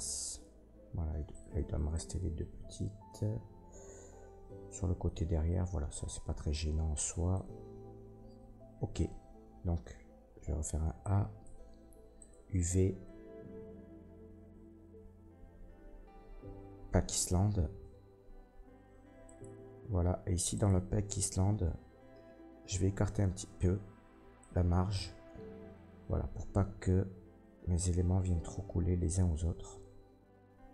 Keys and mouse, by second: 1.3 middle click, 1.9 shift+middle click, 3.5-30.7 drag, 9.5 a.